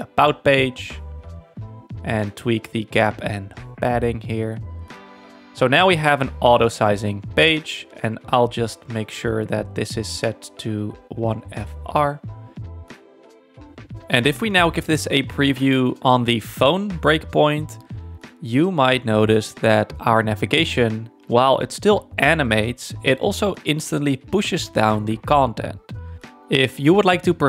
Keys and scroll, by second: 4.2 Tab, 4.4-5.4 typing, 12.0 1, 12.5 Return, 25.7 z.